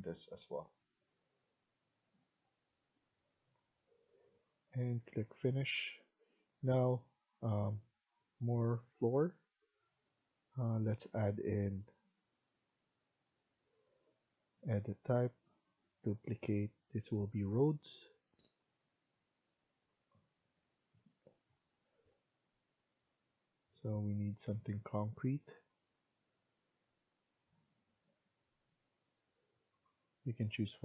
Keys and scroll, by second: 4.8 Escape.